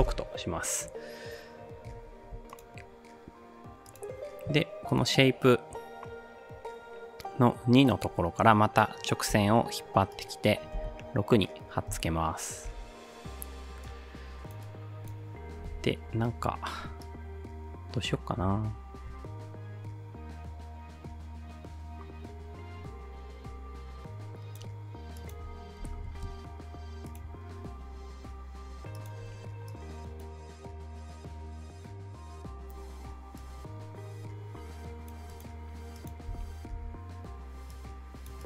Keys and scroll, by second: 0.0 Return, 9.3 ctrl+c, 10.8 ctrl+v, 12.0 space, 12.9 space, 15.7-16.1 typing, 25.6-26.5 typing, 36.3 space, 36.7 space.